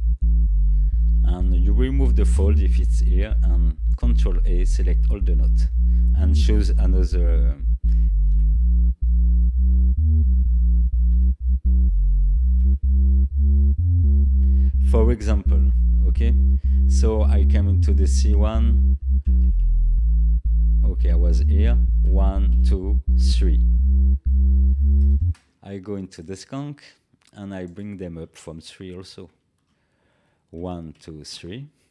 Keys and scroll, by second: 5.3 ctrl+a, 19.2 Down, 25.2 space, 29.2 ctrl+a.